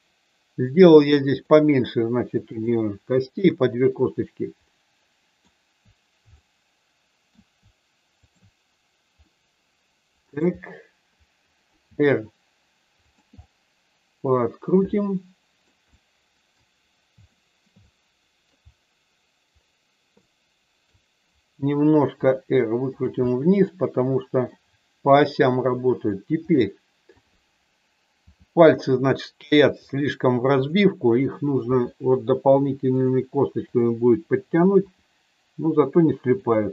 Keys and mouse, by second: 1.4 click, 3.1 shift+click, 4.5 middle click, 6.4 middle click, 8.1 shift+click, 9.1-10.4 middle drag, 11.8 r, 13.4-15.6 middle drag, 15.9 middle click, 17.3 shift+middle click, 17.9 middle click, 20.3 middle click, 22.1 r, 22.9 click, 23.1-24.4 middle drag, 25.4 click, 26.5 middle click, 28.2 r, 29.6 click, 30.7 click, 31.7 r, 32.9 click, 34.8 r, 36.4 click.